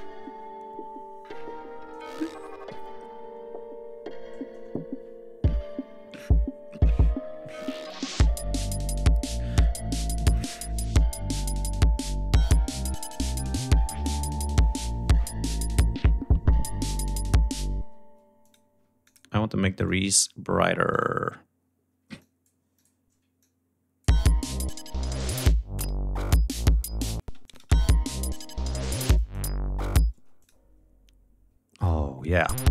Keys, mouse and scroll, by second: 0.9 scroll down 1, 1.2-2.2 scroll up 4, 2.4 ctrl+scroll down 2, 3.2 scroll down 2, 5.2-5.8 scroll down 4, 6.0-6.6 scroll up 4, 7.6-9.9 drag, 10.1 click, 10.9-11.5 scroll up 4, 11.7-12.4 scroll down 4, 12.4-12.8 scroll up 2, 13.1 ctrl+scroll down 2, 13.8-14.7 ctrl+scroll up 7, 15.4-16.3 ctrl+scroll up 5, 17.2 ctrl+scroll up 2, 17.5 ctrl+space, 18.1 click, 18.5 d, 18.8 click, 19.6 click, 20.6 click, 21.9 click, 22.5 click, 23.1 click, 23.8 space, 24.5 ctrl+scroll up 1, 25.8 ctrl+scroll down 1, 26.5 ctrl+scroll up 2, 27.0 ctrl+space, 27.2 ctrl+click, 27.5 ctrl+scroll up 2, 28.9 click, 29.9 space, 30.1 click, 31.6 click, 32.3 space.